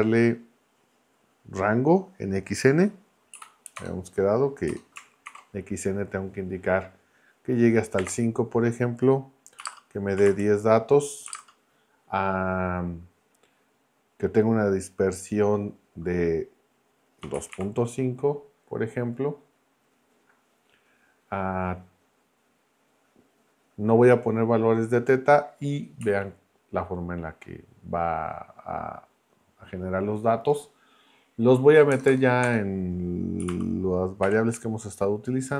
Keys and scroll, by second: 3.3 Right, 3.8 BackSpace, 5.3 shift+9, 8.0 5, 9.5-11.3 typing, 17.0-18.0 typing, 26.0 Right, 31.9 BackSpace, 33.2-34.2 typing.